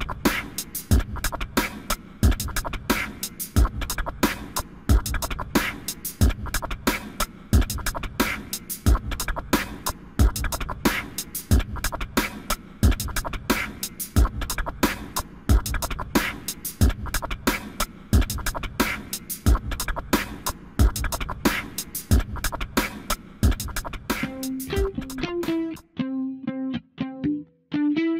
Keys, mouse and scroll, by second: 1.6 click, 7.3 ctrl+z, 10.3 click, 25.5 right click, 26.7 click.